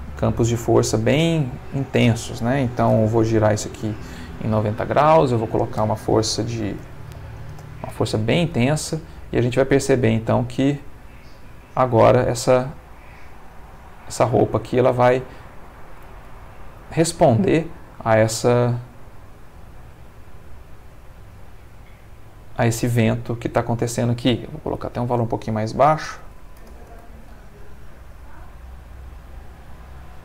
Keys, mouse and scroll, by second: 0.4 click, 1.7 click, 2.9 r, 3.1 9, 3.2 0, 3.7 Return, 5.2 ctrl+click, 6.7 6, 6.8 0, 7.4 Return, 8.5 space, 20.3-21.7 middle drag, 23.7 Escape, 24.7 click, 25.9 2, 26.0 0, 26.6 Return, 26.8 space.